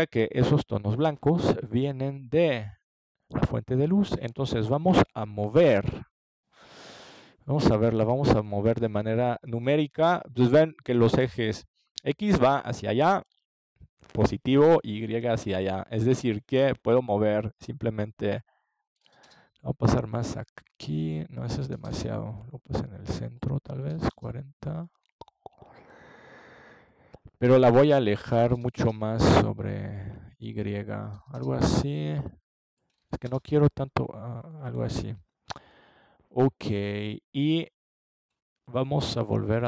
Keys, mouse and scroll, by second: 4.3-5.8 drag, 18.6 KP_0, 24.5 middle click, 31.7 middle click, 31.9 middle click, 34.9 middle click.